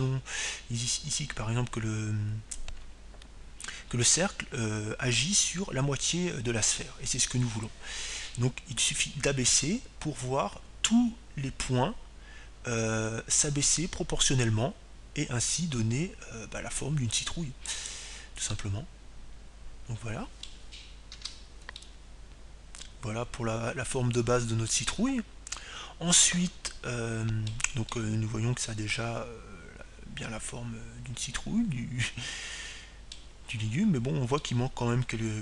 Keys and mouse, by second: 20.0-21.7 drag, 20.6-22.4 middle drag, 23.3 Tab, 23.8-25.6 middle drag, 30.1-32.0 middle drag.